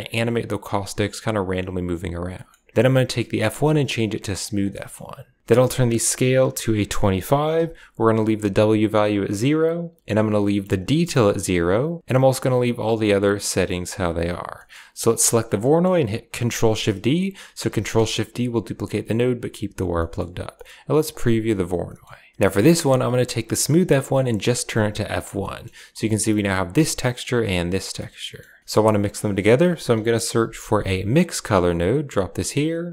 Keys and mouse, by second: 2.3 middle click, 2.8-3.9 drag, 4.3 click, 4.6 middle click, 5.4 ctrl+z, 5.5-7.5 drag, 10.3 middle click, 14.4 middle click, 15.1 click, 15.5 middle click, 17.6 ctrl+shift+d, 19.9 click, 20.4 click, 21.0 ctrl+shift+click, 21.7 middle click, 23.2-24.7 drag, 25.2 middle click, 26.6 ctrl+shift+click, 27.5 ctrl+shift+click, 27.8 middle click, 29.0 shift+a.